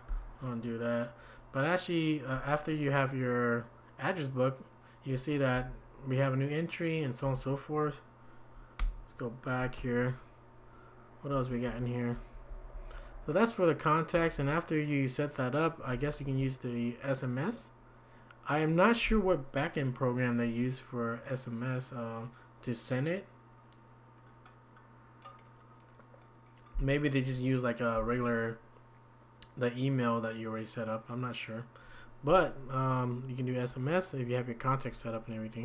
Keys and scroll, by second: 0.1 Escape, 5.5 Down, 8.8 Escape, 12.5 Down, 12.7 Down, 12.9 Down, 13.1 Down, 14.1 Up, 14.3 Up, 15.9 Down, 16.2 Up.